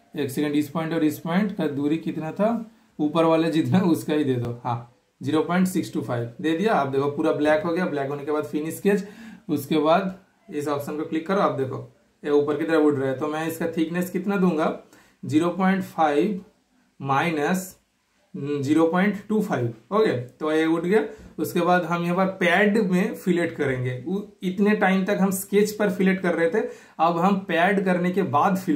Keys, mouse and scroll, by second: 0.4 super+click, 3.7 super+Return, 4.3 super+right click, 4.7 super+click, 5.0 super+scroll down 1, 5.2 super+scroll up 1, 5.8 super+scroll down 1, 6.0-6.5 super+scroll up 1, 6.5 super+scroll down 1, 7.0 super+scroll up 1, 7.0 typing, 7.1-8.5 shift+super+middle drag, 9.0 super+click, 9.0 typing, 10.0 super+click, 19.6 super+Return, 19.6 typing, 19.7 super+scroll up 1, 20.0 super+scroll down 1, 20.3 super+scroll up 1, 20.8 super+click, 26.3 super+click, 26.3 typing, 28.7 super+Return, 28.7 typing.